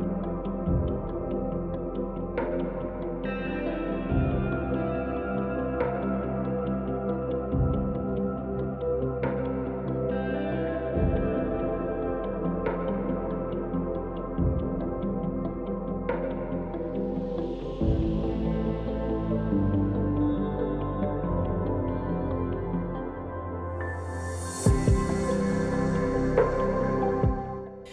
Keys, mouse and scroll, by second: 1.2 k, 8.3 click, 10.8-15.9 drag, 17.6 click, 19.5 k, 24.8 click, 27.7 click.